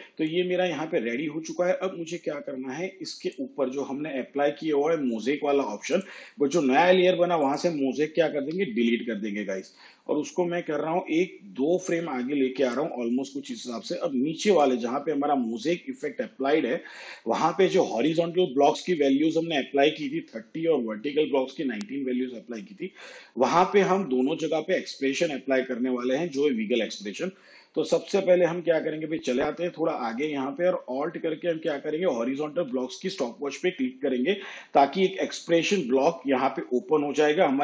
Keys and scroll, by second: 8.5 Delete.